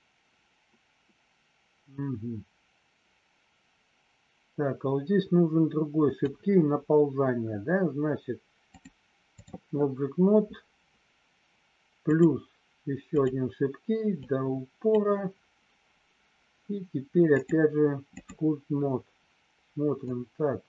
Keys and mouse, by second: 8.8 click, 12.2 click, 13.2 click, 14.3 click, 17.3 click, 20.1-20.6 drag.